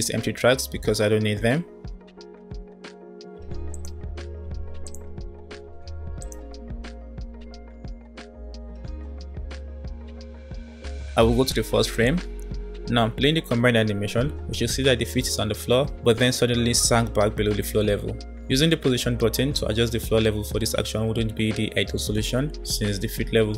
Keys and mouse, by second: 3.0 Delete, 3.4 click, 4.0 Delete, 4.8 click, 5.6 Delete, 6.2 click, 11.8 click, 13.1 space, 14.7 space.